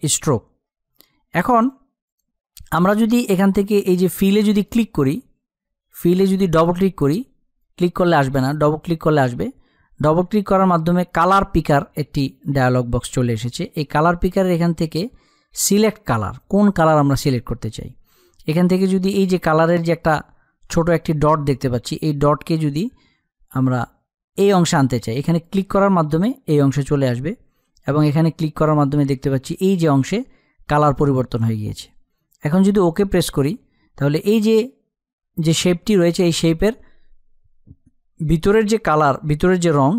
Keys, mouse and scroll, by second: 6.9 click.